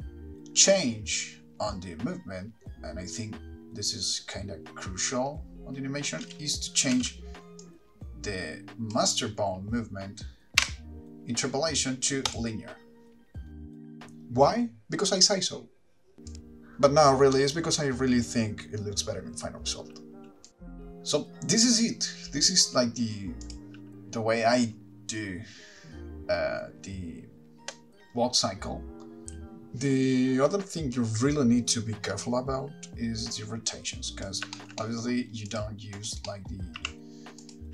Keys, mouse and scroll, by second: 6.5 space, 7.2 space, 7.8 click, 12.6 t, 14.0 click, 16.1 click, 16.1 space, 18.1 shift+middle click, 20.8-22.2 scroll down 1, 23.6 click, 29.2 shift+middle click, 29.2 click, 29.2-32.1 scroll down 4, 29.2 KP_Decimal, 32.8 middle click, 32.8 click, 34.7 shift+middle click, 35.0 middle click, 35.8 click, 36.3 click, 36.5 middle click.